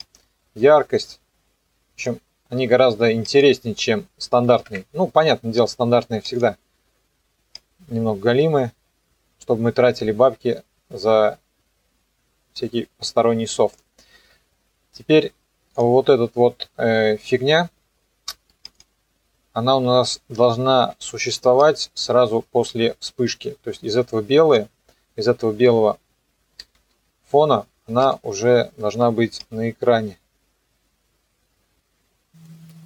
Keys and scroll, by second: 4.5 KP_4, 4.7 KP_Enter, 26.7 alt+[, 28.0 u.